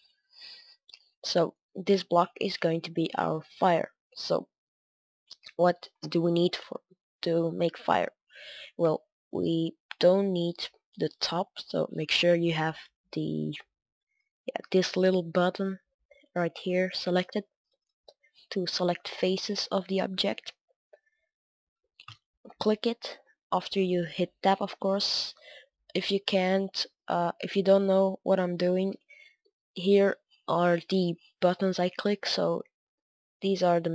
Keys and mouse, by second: 0.0-4.4 drag, 1.4-4.4 right drag, 4.4-8.8 middle drag, 8.8 Tab, 10.3-11.4 middle drag, 11.4-12.4 right drag, 15.6-19.8 drag, 15.6-17.5 right drag, 18.7-24.5 right drag, 23.2 Tab, 23.6 Tab, 24.5-26.9 middle drag, 27.3 middle click, 29.4 Tab, 33.2-33.9 drag, 33.4 Tab.